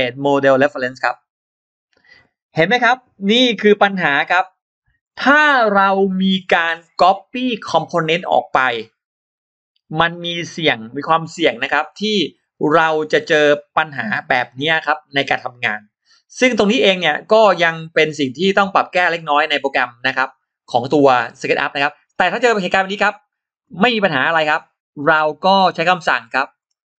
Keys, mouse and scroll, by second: 3.8-4.1 scroll up 2, 21.9 scroll down 2, 23.4 click, 24.1 scroll down 2, 26.0-26.4 scroll up 2, 26.4-26.8 scroll down 2.